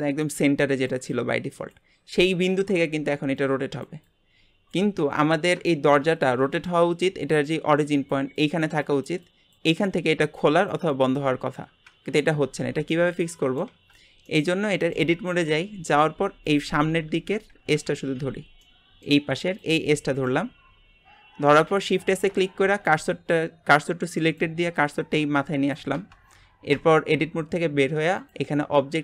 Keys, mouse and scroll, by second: 5.7 shift+middle click, 6.1 scroll up 1, 12.6 scroll up 2, 12.9 middle click, 13.7 Tab, 14.2-16.4 middle drag, 16.4 click, 17.0 Tab, 17.7 KP_Divide, 18.2 Tab, 18.6 middle click, 19.6 click, 20.1 click, 21.7 shift+s, 26.8 Tab, 28.1-29.0 drag.